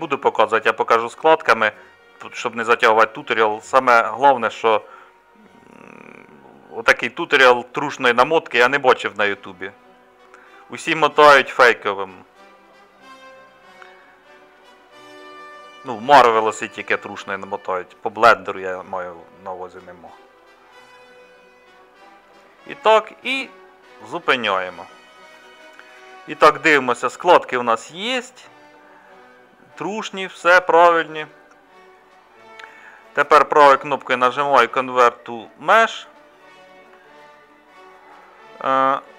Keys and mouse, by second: 25.4-28.0 middle drag, 28.7-30.6 middle drag, 31.3 middle click.